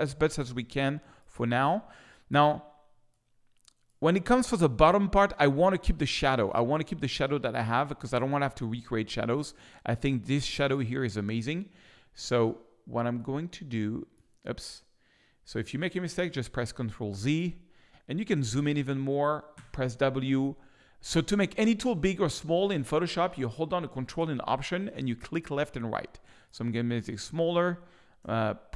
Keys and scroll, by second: 16.3 super+z, 18.2 z, 19.5 w, 20.3 ctrl+alt+w.